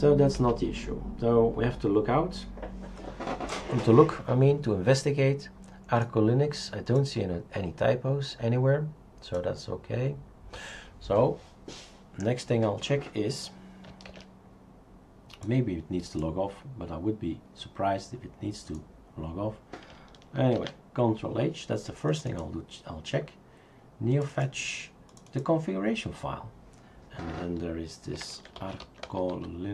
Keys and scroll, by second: 0.4 shift+super+q, 14.1 shift+super+q, 20.5 ctrl+h, 28.1 ctrl+f, 28.2-29.7 typing.